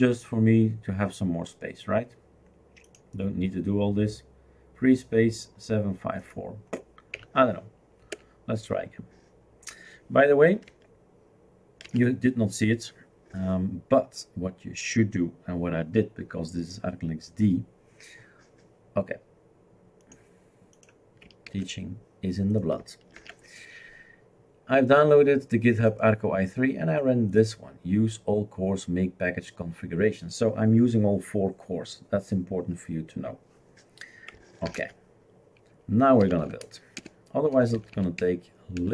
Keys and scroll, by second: 7.1 Up, 8.1 Return, 11.8 ctrl+c, 21.6 shift+super+q, 23.2 ctrl+h, 34.7 ctrl+alt+t, 36.0-38.9 typing.